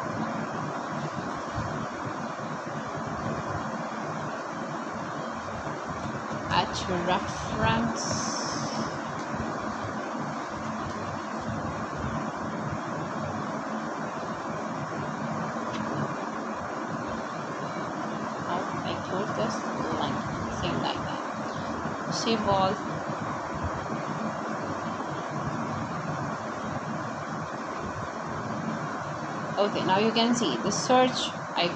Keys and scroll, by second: 4.4 shift+', 25.9-28.0 typing, 29.9-31.2 typing.